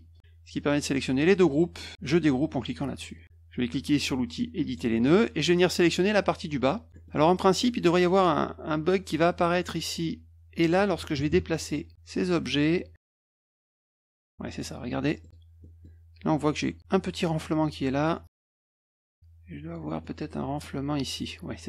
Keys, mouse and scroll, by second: 2.8 click, 4.6 click, 5.9 click, 6.9 middle click, 7.1 middle click, 7.6 middle click, 9.5 middle click, 11.0 -, 11.1 -, 11.3 -, 12.4-14.6 drag, 15.1 middle click, 15.6 middle click, 17.2 middle click, 18.1 middle click, 19.1 click, 20.0 middle click.